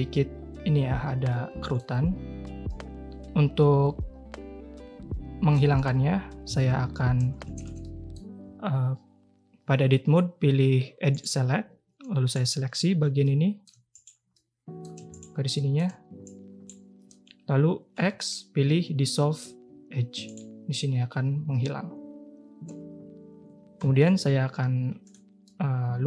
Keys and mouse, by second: 1.3-1.7 middle drag, 2.6-5.5 middle drag, 6.4 Tab, 7.5 a, 7.6 a, 7.8 middle click, 11.1 click, 12.3-12.7 drag, 13.2 middle click, 13.9 shift+middle click, 14.3 middle click, 15.5 middle click, 16.2-16.6 shift+drag, 17.9 x, 23.7 k, 25.5-26.0 drag.